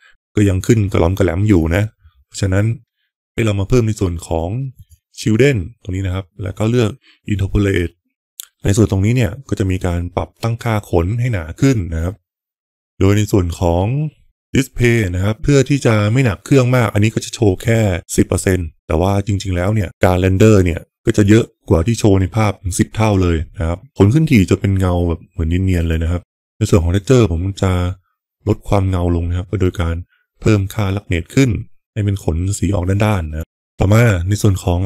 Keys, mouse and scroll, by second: 4.7 click, 7.6 click, 17.6-19.9 drag, 20.9 F12, 28.4-33.3 drag, 34.4 click.